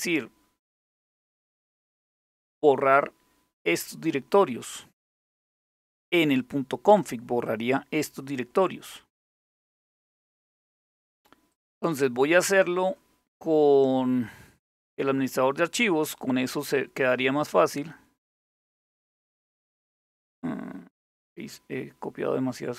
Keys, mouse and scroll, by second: 0.9-1.8 typing, 11.1 click, 14.3 click.